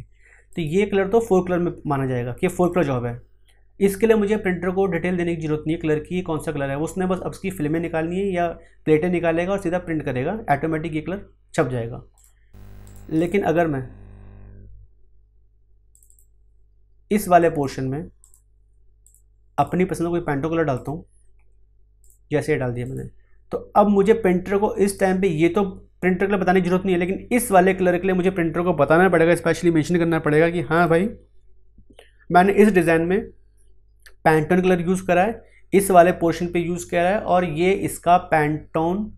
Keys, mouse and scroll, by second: 12.1 click, 15.9 click, 27.3 click, 30.7 click, 35.8 click.